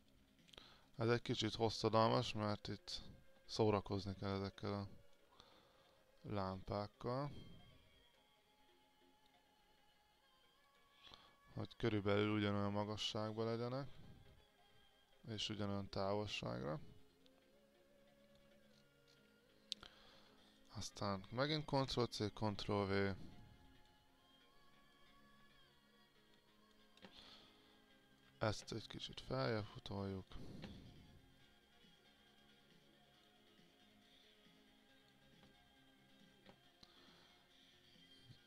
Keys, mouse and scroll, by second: 0.9-3.5 drag, 3.7 alt+click, 6.0 click, 6.9 alt+click, 8.3 click, 8.6-14.3 drag, 14.5-18.3 alt+drag, 18.6-20.7 scroll down 1, 20.7 click, 21.7 ctrl+c, 21.9 ctrl+v, 23.6 click, 24.8-27.6 drag, 27.8 alt+click, 29.6-35.6 drag, 35.7 alt+click, 37.2-38.4 drag.